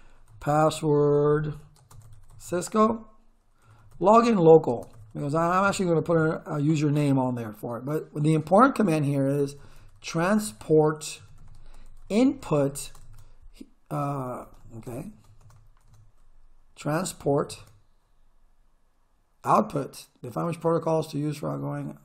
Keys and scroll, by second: 0.1-6.1 typing, 9.2-14.4 typing, 16.8 space, 17.5 shift+/.